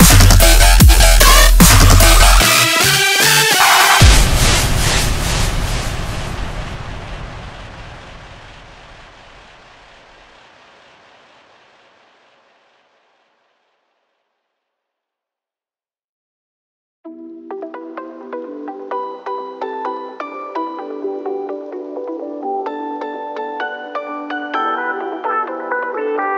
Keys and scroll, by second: 23.5-24.3 typing.